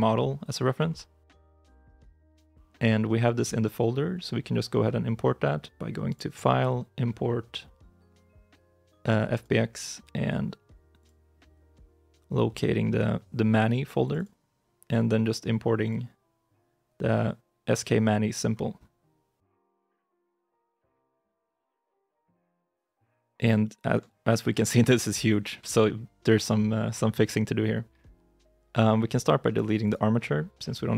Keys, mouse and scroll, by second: 21.1 scroll down 1, 21.9 middle click, 22.3 shift+middle click, 22.9-23.3 scroll down 1, 23.5 shift+middle click, 24.8 middle click, 25.1 shift+middle click, 26.0-28.0 scroll down 1, 29.7 right click.